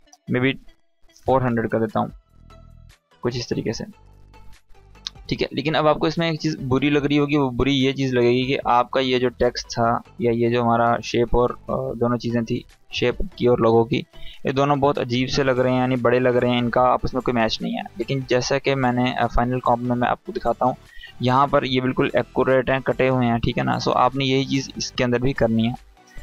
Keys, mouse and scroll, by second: 2.7-4.2 drag, 7.8-8.7 drag, 11.8 click, 15.2 click, 18.8 click, 23.9 click.